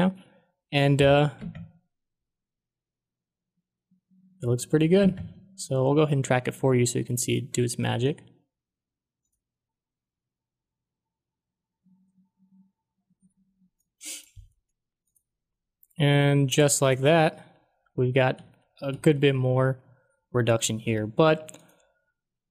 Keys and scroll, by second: 1.3 space, 5.1 space, 17.3 ctrl+d, 17.8 ctrl+d.